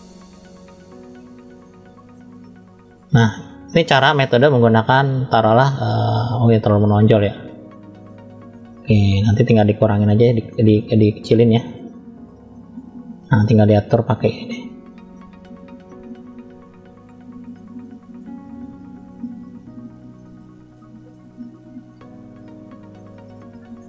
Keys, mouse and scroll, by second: 0.0 scroll up 2, 0.5 middle click, 2.0-3.0 shift+middle drag, 3.2-3.7 scroll down 2, 3.7-5.2 middle drag, 5.5 scroll down 1, 6.0-7.1 middle drag, 6.0 scroll down 1, 7.6-8.9 middle drag, 9.2-10.5 middle drag, 10.9-11.4 scroll up 1, 11.5 shift+middle click, 12.5 middle click, 13.5-14.1 scroll up 1, 14.3 click, 15.0 middle click, 15.9-16.5 scroll down 1, 17.0 f, 18.1 click, 18.9 click, 19.3 click, 19.7 click, 20.1 middle click, 20.9 middle click, 21.9 click, 22.2 click, 22.6 click, 23.2 middle click.